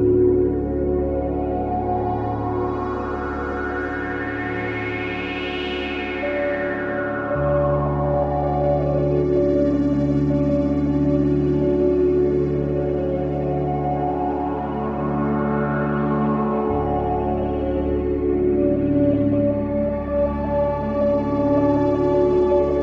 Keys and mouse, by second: 0.7 click, 1.1 click, 2.0 typing, 4.2-5.7 drag, 4.9 typing, 7.4 click, 8.4-9.6 typing, 9.1-10.3 drag, 10.8-13.7 typing, 14.9-15.7 typing, 15.2 click, 15.8 click, 17.0 click, 17.5-19.3 typing, 18.2 click, 20.4 click, 21.8 click, 22.3 click.